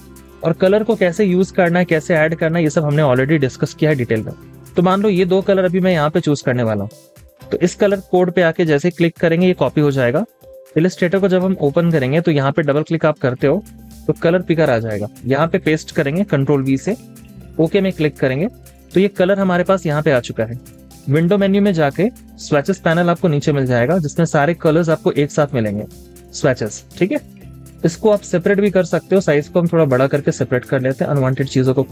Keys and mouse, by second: 8.4 typing, 12.7 double click, 16.5 typing, 17.0-21.1 drag, 23.6-26.6 drag.